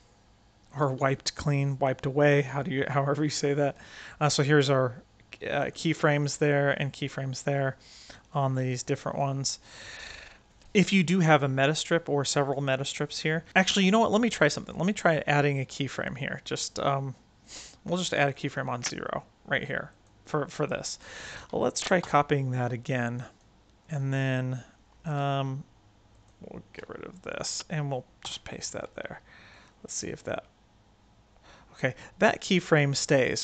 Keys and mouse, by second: 0.9 Tab, 1.6 click, 5.5 click, 7.9 click, 8.4 click, 8.9 click, 9.7 Tab, 18.1 click, 19.9 click, 21.9 ctrl+c, 23.2 click, 25.0 click, 25.2 Tab, 26.7 x, 28.2 ctrl+v, 29.5-31.7 drag.